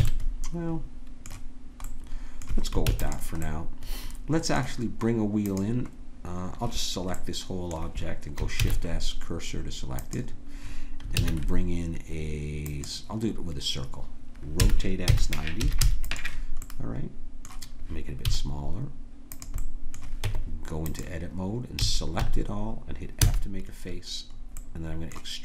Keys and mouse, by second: 0.0 a, 2.8 ctrl+s, 5.5-10.1 drag, 8.6 shift+s, 11.1 shift+a, 14.6 r, 16.7-18.7 drag, 18.3 s, 20.3 Tab, 21.8 a, 22.2 a, 23.2 f.